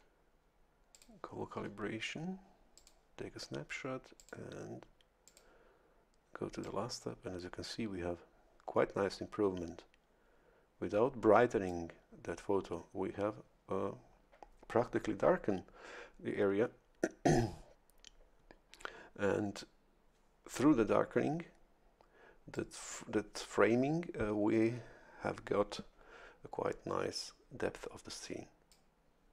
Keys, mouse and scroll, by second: 0.9 click, 2.7 click, 4.2 click, 5.2 click, 6.6-12.0 drag, 22.5-28.9 drag.